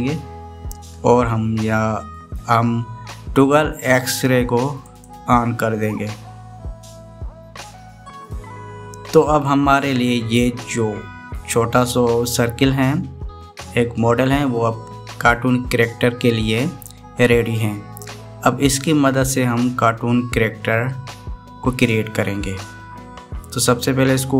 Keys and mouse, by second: 0.1 click, 5.7 click.